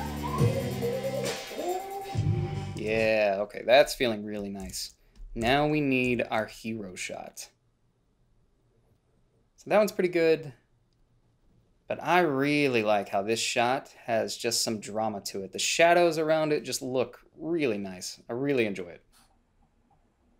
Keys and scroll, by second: 3.1 space, 5.0 ctrl+b, 5.7 h, 6.4 a.